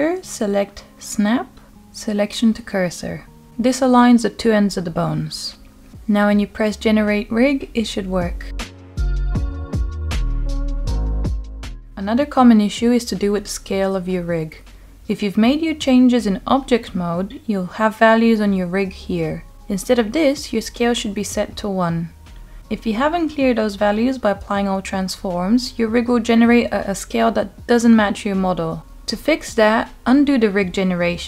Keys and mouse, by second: 6.7 Tab, 7.3-7.6 middle drag, 9.7 click, 11.2-12.7 middle drag, 19.9 click, 21.1-21.5 middle drag, 22.2-22.5 shift+middle drag, 23.2 middle click, 24.8-25.2 middle drag, 26.0-27.8 middle drag, 28.3-28.7 middle drag, 30.0-30.3 shift+middle drag.